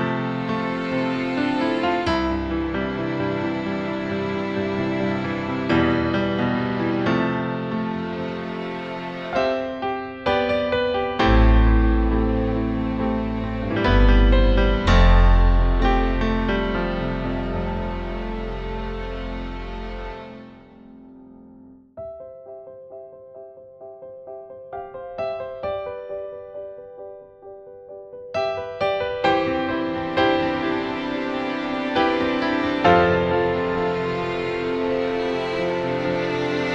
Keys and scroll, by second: 3.5 BackSpace, 4.3 BackSpace, 5.5 BackSpace, 10.7 BackSpace, 11.7 BackSpace, 12.0 b, 12.4 e, 13.9 BackSpace, 14.8 BackSpace, 15.4 BackSpace, 16.5 b, 16.9 BackSpace, 19.4 BackSpace, 25.0 BackSpace.